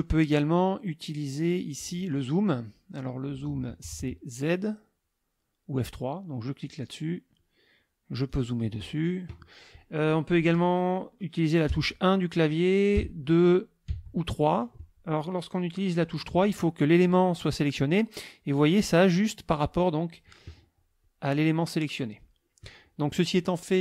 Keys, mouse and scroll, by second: 6.6 click, 8.3 click, 8.8 click, 11.7 KP_1, 13.0 KP_2, 13.9 KP_3.